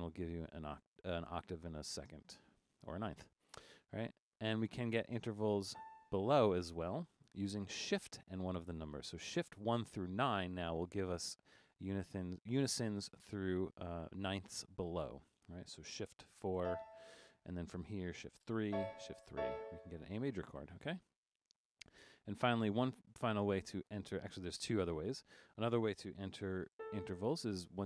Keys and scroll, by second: 2.1 Up, 2.3 Up, 2.4 Up, 2.5 Up, 3.9 Up, 4.1 Up, 4.2 Up, 5.7 Return, 16.6 shift+4, 18.7-19.4 typing, 22.0 Down, 22.1 Down, 22.3 Down, 22.4 Down, 22.6 Down, 22.7 Down, 22.9 Down, 26.8 a.